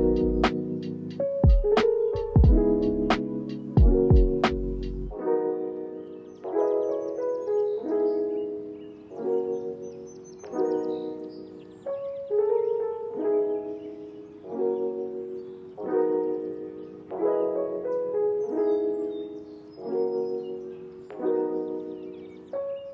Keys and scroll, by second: 9.4 v, 10.0 space, 20.4 ctrl+s, 20.7 space, 21.4 v, 22.3 ctrl+a.